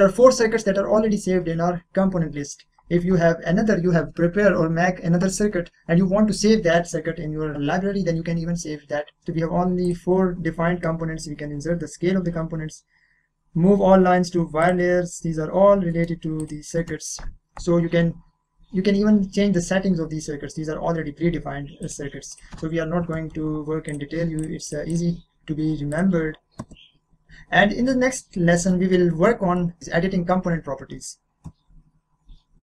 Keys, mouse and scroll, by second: 9.8 click, 14.6 click, 15.3 scroll down 1, 15.9 middle click, 16.4 click, 20.1 scroll up 1, 21.3-21.8 scroll down 1, 21.8 click, 23.9 click, 27.1 scroll down 1, 28.0-28.6 scroll up 2, 28.3 middle click, 28.9-31.3 middle drag.